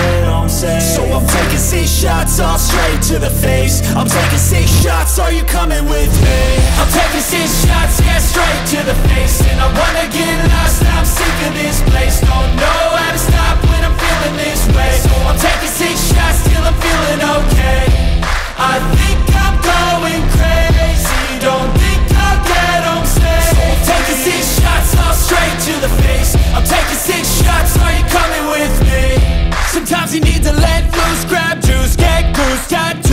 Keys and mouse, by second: 6.3 click, 8.9-12.4 middle drag, 12.4 click, 14.9-16.9 drag, 20.0 g, 22.6 z, 24.4 click, 26.6 click, 30.2 click, 31.4 click.